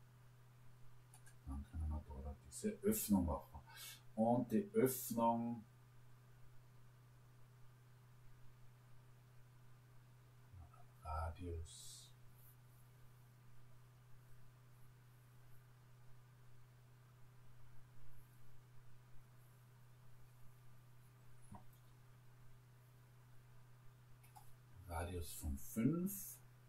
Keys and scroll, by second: 24.1 5.